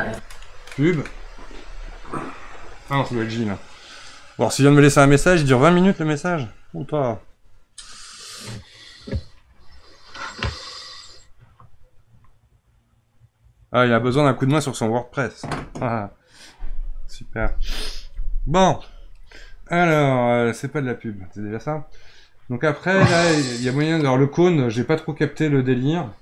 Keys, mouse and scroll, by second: 0.0 space, 23.7 click.